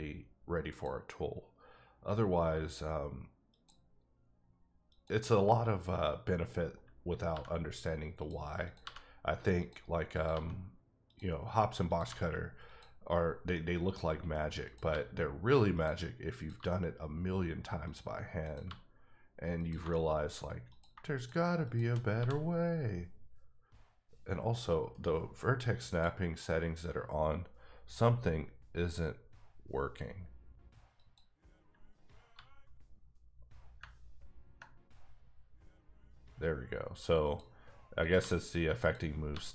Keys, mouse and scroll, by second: 0.7 click, 3.5 click, 4.9 click, 7.4 g, 7.7 g, 8.2 click, 8.6 click, 8.8 g, 9.6 click, 10.1 click, 10.3 g, 11.1 click, 11.9 click, 12.0 g, 12.6 click, 13.3 scroll down 2, 13.5 middle click, 14.1-14.6 scroll up 1, 14.9 g, 15.7 click, 16.4 click, 16.6 g, 17.8 click, 18.4 click, 18.6 g, 19.6 click, 19.9 shift+middle click, 20.7 click, 21.6 shift+double click, 22.2 g, 24.9 g, 25.9 click, 32.3 g, 37.2 g, 37.2 click, 38.0 click, 38.2 g, 38.8 click, 39.3 g.